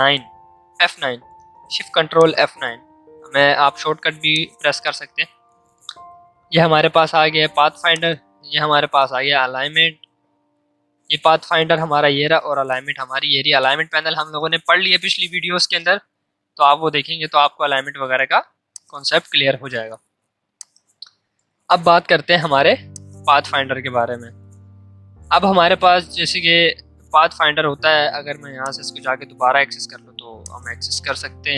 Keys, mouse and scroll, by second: 2.1 click, 4.3-7.7 drag, 7.9-11.3 drag, 18.6-26.8 drag, 26.8 ctrl+z, 27.5 ctrl+shift+z, 28.6 click, 30.4-31.5 drag.